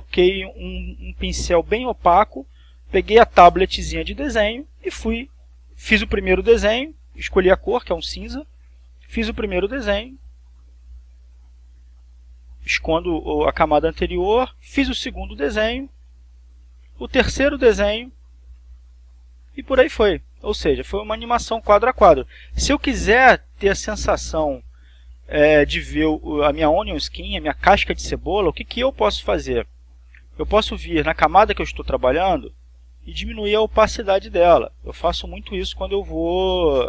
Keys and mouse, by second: 11.0 click, 12.5 click, 16.7 click, 17.5 click, 18.2 click, 18.8 click, 20.1-21.7 drag, 21.8 click, 24.0-25.2 drag, 29.3 click, 30.5 click, 35.1-36.5 drag.